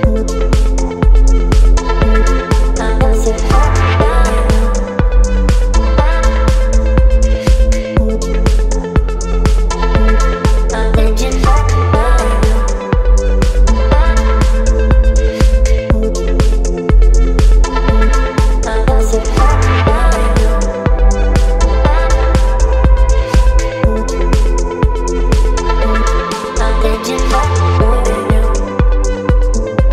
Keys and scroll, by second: 5.1 [, 5.3 [, 27.7 Delete.